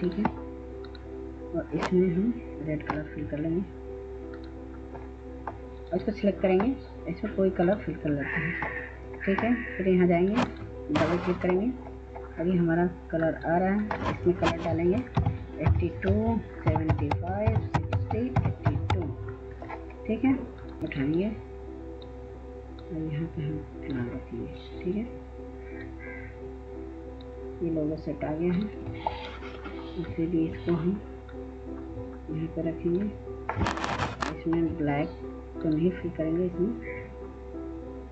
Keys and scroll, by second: 15.0-16.8 typing, 18.8 typing.